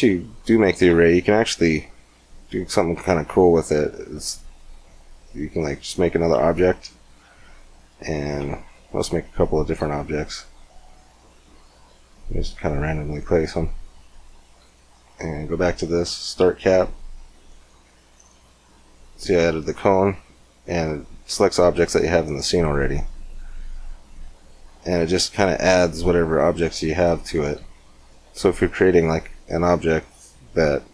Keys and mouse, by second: 0.7 shift+a, 6.3 g, 8.3 shift+a, 11.0 g, 14.3-15.8 drag, 15.8 middle click, 16.1-17.7 drag, 17.7-21.5 middle drag, 21.5-24.2 drag, 24.2-26.8 middle drag, 26.9-28.2 middle drag.